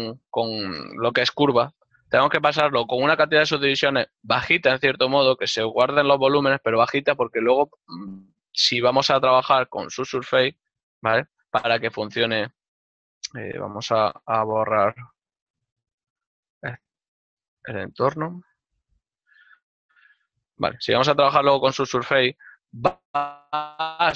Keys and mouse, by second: 0.5 Tab, 2.2 click, 7.6 click, 13.8 Tab, 14.3 Tab, 20.1 right click, 20.6 Tab, 21.9 click.